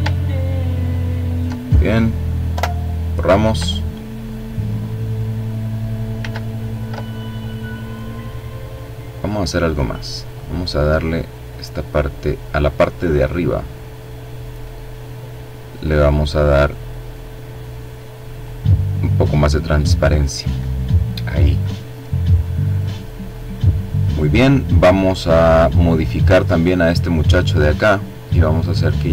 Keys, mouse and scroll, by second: 0.6 ctrl+click, 1.6 Delete, 4.0-4.7 ctrl+scroll up 2, 5.3 ctrl+z, 6.5 click, 8.2 click, 10.0-14.2 drag, 14.8 click, 16.2-18.0 drag, 20.7-23.5 drag, 25.2 click, 28.4-29.1 drag.